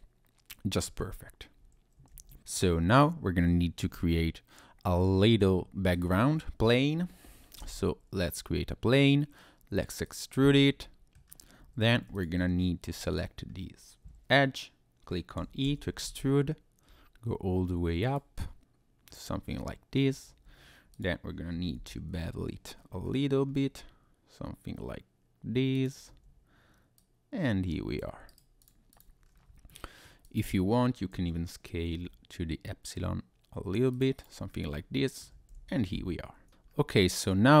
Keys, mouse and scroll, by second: 2.1 ctrl+s, 2.4 click, 3.9 shift+a, 6.3-7.6 scroll down 1, 7.6 s, 10.0 click, 10.5 middle click, 11.3-11.6 scroll down 1, 11.6 Tab, 12.1 alt+click, 12.9 scroll down 1, 13.5 scroll up 1, 15.6 e, 16.1 z, 18.0 click, 18.4 middle click, 19.5 middle click, 20.1 Tab, 20.4 Tab, 20.9 click, 21.8 ctrl+b, 22.8-25.0 scroll up 5, 25.7 click, 26.1 Tab, 27.0 click, 28.3 right click, 28.9 click, 29.2-29.7 scroll down 1, 29.7 middle click, 30.0 scroll down 1, 30.2 click, 31.1 s, 31.9 y, 33.9 click, 34.2 click, 34.5-34.9 scroll up 2, 34.9 middle click, 35.5 ctrl+s, 36.5 scroll down 1, 36.7 scroll up 1, 37.0-37.6 scroll down 1.